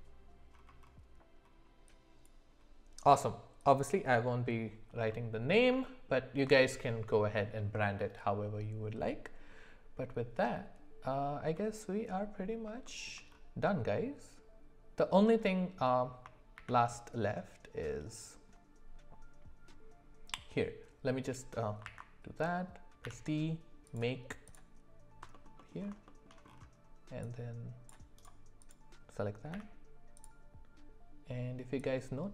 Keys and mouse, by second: 5.1-5.6 middle drag, 5.9 shift+middle drag, 11.6 middle click, 12.9 shift+middle click, 16.5 shift+a, 21.8 alt+w, 23.0 d, 25.3 middle click, 25.6 middle click, 26.1 shift+middle click, 27.7 click, 28.7 click, 29.5 d.